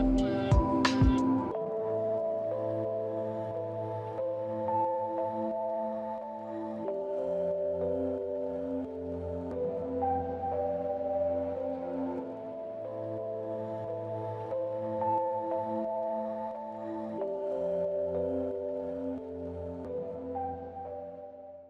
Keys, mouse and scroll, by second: 20.9 right click.